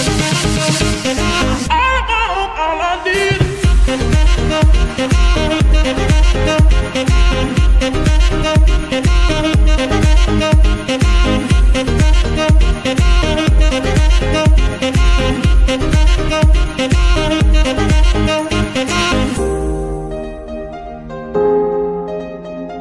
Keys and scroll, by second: 1.0 shift+-, 3.3-4.4 typing, 4.9 Return, 5.8 F2, 6.8 ., 7.1 l, 7.5 Return, 10.0 KP_1, 11.9 shift+d, 14.6 g, 18.7 g, 22.5 KP_3.